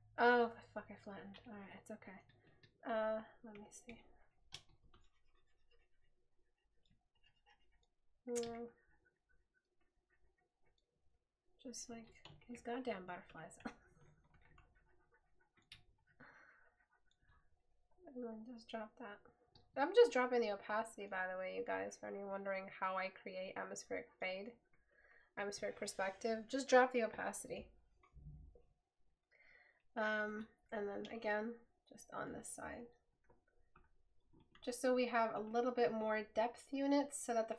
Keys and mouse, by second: 1.6 right click, 2.9 right click, 12.7 right click.